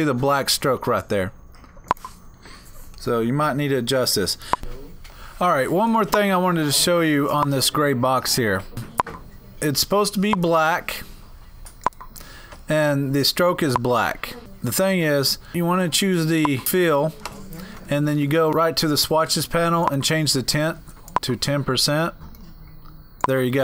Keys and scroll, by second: 3.7 Down, 4.6 typing.